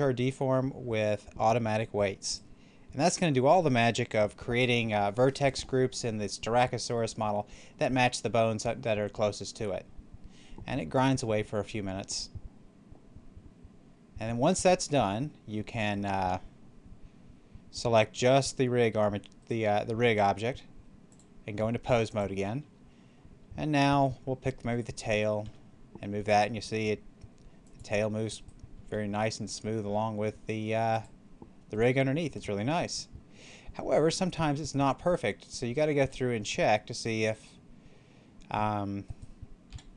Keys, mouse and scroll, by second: 2.2 click, 18.1 right click, 21.0 click, 24.7 right click, 25.4 r, 27.5 click, 28.2 right click, 28.7 r, 30.8 click, 31.6 right click, 32.2 r, 32.7 click, 35.3 right click, 35.9 r, 37.2 right click, 39.6 r.